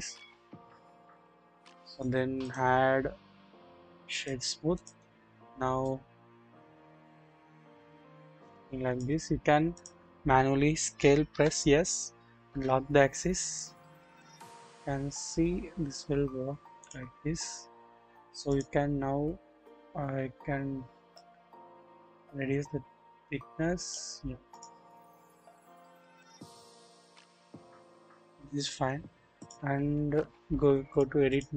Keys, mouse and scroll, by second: 1.1 click, 1.9 click, 2.4 right click, 2.4-4.4 drag, 5.2-5.8 scroll down 1, 5.8-9.1 drag, 9.2-9.7 scroll up 1, 9.7 click, 10.1 scroll down 1, 11.3 typing, 14.3 typing, 17.3-18.1 scroll up 1, 18.1 typing, 19.1-19.9 scroll down 1, 21.2-23.9 drag, 21.2 typing, 24.5 click, 24.8-25.5 scroll down 1, 25.5-28.2 drag, 25.5 scroll down 1, 25.6 typing, 28.3-28.8 scroll down 1, 28.8-29.6 scroll up 1, 31.0 double click, 31.0 typing.